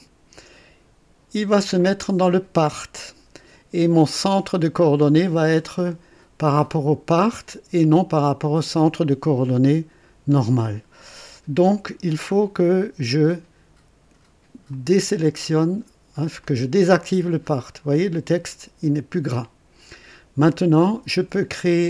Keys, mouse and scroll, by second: 7.8-8.7 drag, 14.7 click, 16.4 click, 20.7 click.